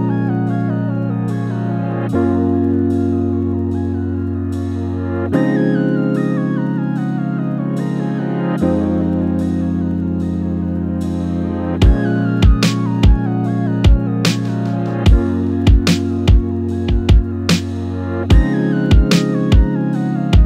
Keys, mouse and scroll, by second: 4.8-7.0 drag, 7.2 f, 7.9 click, 8.6 z, 9.0 middle click, 9.2-9.6 scroll up 1, 9.7 alt+click, 11.0 f, 11.3 middle click, 11.9 alt+click, 12.2 f, 12.4 middle click, 12.9 KP_0, 13.3 z, 15.7 KP_7, 16.0 scroll down 1, 16.1 middle click, 16.4 scroll up 1, 16.5 middle click, 17.6 Tab, 18.0 KP_0, 19.7 KP_0, 19.9-20.4 middle drag, 19.9 scroll up 1.